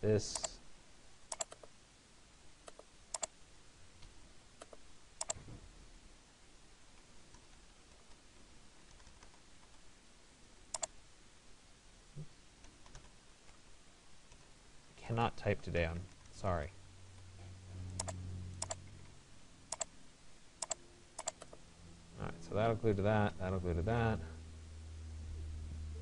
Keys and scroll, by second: 3.7 Escape.